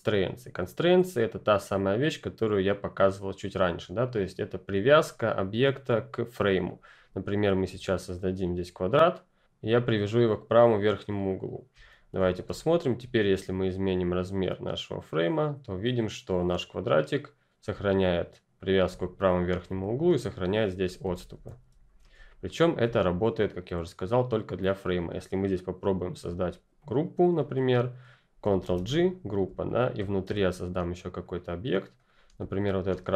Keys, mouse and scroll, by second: 6.7 click, 7.7 r, 8.1 click, 11.2 click, 11.8 ctrl+scroll down 1, 12.2 click, 12.4 space, 12.6 click, 14.7 click, 21.1 ctrl+z, 22.4-24.5 ctrl+scroll up 2, 25.1 click, 26.2 r, 26.8 click, 28.6 ctrl+g, 29.0 click, 30.2 r, 30.4 click.